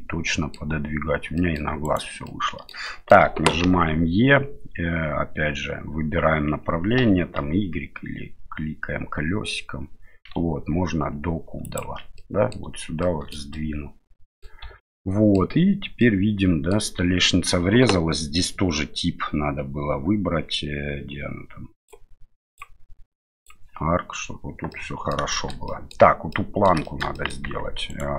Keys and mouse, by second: 1.3 middle click, 1.8 right click, 2.2 middle click, 2.8 shift+middle click, 3.6 e, 12.1 middle click, 13.0 shift+middle click, 13.5 middle click, 14.6 Tab, 14.9-15.4 middle drag, 16.0-16.7 middle drag, 22.5-23.5 drag, 24.7 middle click, 25.3 shift+middle click, 26.3 middle click, 26.8 shift+middle click, 27.1 middle drag, 27.4 Tab, 27.9 right click.